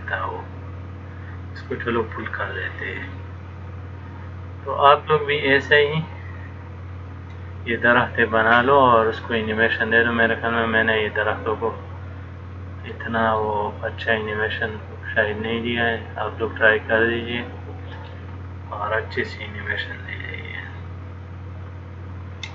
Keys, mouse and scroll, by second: 3.3 middle click, 13.7 middle click.